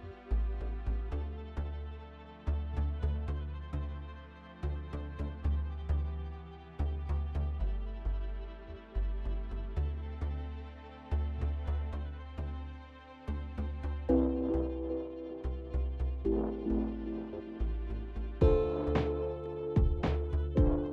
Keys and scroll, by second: 19.6 ctrl+s, 20.1 ctrl+s, 20.6 ctrl+s, 20.8 ctrl+s.